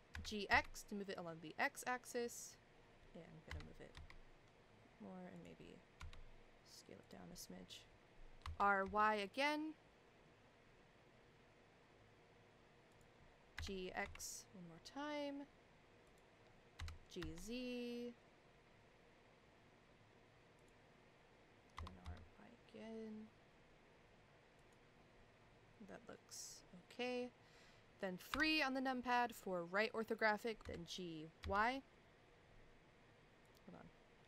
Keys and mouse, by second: 3.5 g, 6.0 s, 8.4 r, 13.5 g, 16.8 g, 21.8 r, 28.3 KP_3, 31.6 g.